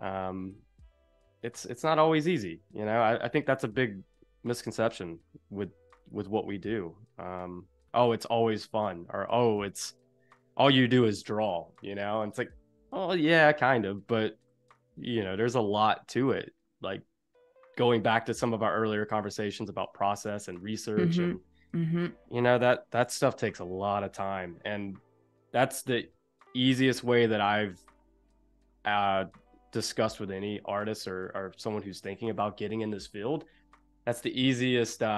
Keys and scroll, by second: 0.5 a, 6.1 v, 9.4 a, 11.3 Delete, 14.4 Delete, 16.0 Delete, 18.1 Delete, 20.2 Delete, 23.0 super+j, 26.0 Escape, 32.0 i.